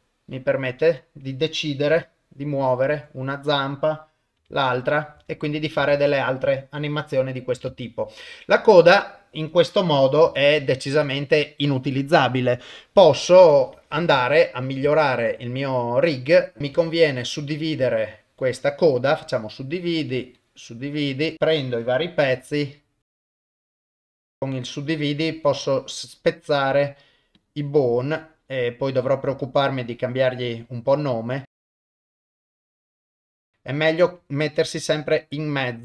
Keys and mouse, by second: 1.9 g, 3.5 click, 4.4 g, 6.0 ctrl+s, 6.8 shift+middle click, 7.8 ctrl+middle click, 8.3 shift+middle click, 8.9 click, 10.3 r, 13.8 Tab, 14.3 ctrl+middle click, 14.9 shift+middle click, 16.1 click, 16.8 click, 18.2-19.4 right drag, 19.9 right click, 21.3 click, 22.3 g, 23.2 click, 23.6 g, 23.7 click, 23.8 right click, 24.1 g, 24.3 right click, 24.7 click, 25.1 g, 26.5 click, 26.9 right click, 28.0 click, 28.2 click, 29.3 g, 31.4 click, 31.6 click, 31.8-32.7 typing, 32.2 right click, 32.3 click, 33.7 click, 34.0 g, 34.6 click, 35.2 click.